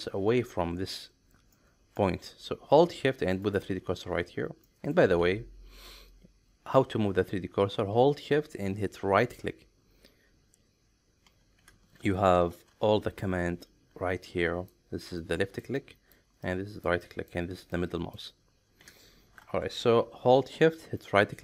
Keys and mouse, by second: 1.5 middle click, 3.4 shift+right click, 4.7 middle click, 5.2 ctrl+z, 9.2 shift+right click, 12.3 ctrl+shift+3.